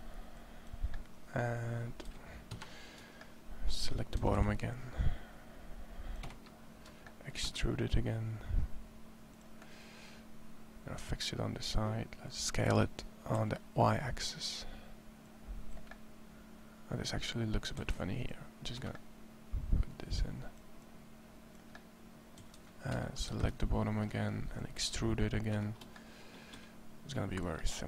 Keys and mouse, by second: 1.8 a, 2.4 KP_1, 3.6 a, 4.0 a, 4.2 c, 7.2 e, 12.2 s, 14.4-15.5 drag, 16.7 middle click, 17.6 a, 17.8 c, 20.6-21.7 drag, 22.2 a, 22.4 c, 23.1 KP_1, 26.4 e.